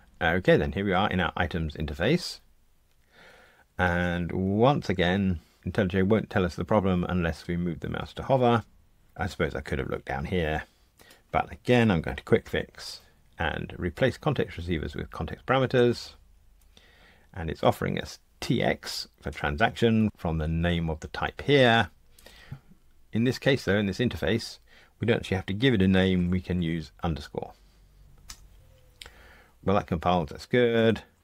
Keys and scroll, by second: 12.4 alt+Return, 30.7 F2.